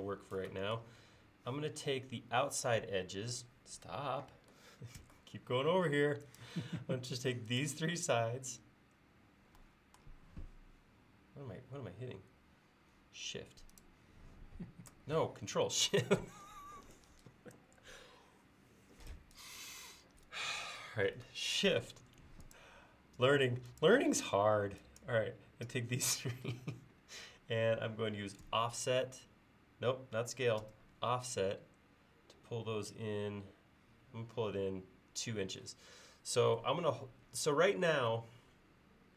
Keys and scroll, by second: 5.1 space, 7.7 Up, 7.8-8.1 typing, 7.9 Up, 8.0 Up, 28.5 s, 30.7 f.